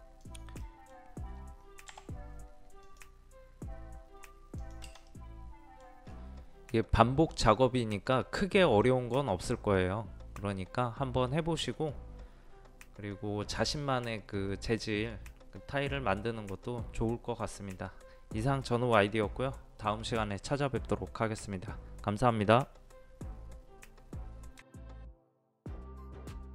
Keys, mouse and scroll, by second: 0.6-1.7 middle drag, 1.9 m, 2.8 click, 5.1 middle click, 6.0 scroll up 1, 6.1 middle click.